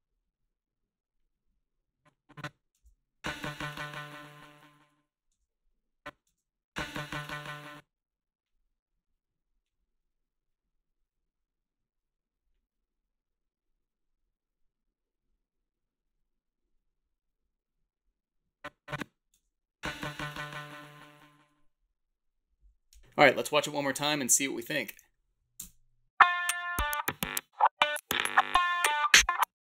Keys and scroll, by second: 2.7 space, 5.3 space, 6.3 space, 7.5 space, 19.3 space, 25.4 Home, 25.6 space.